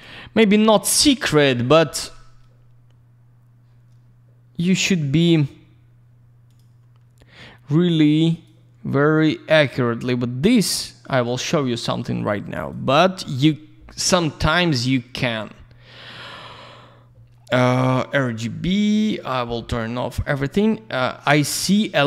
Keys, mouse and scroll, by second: 0.3 click, 6.4 click, 8.3 click, 10.0 click, 12.5 click, 12.6 click, 14.3 click, 14.4 click, 17.7 click, 17.8 click, 18.9 click, 19.0 click, 19.1 click, 19.2 click, 21.0 scroll up 1, 21.6-22.0 scroll down 1.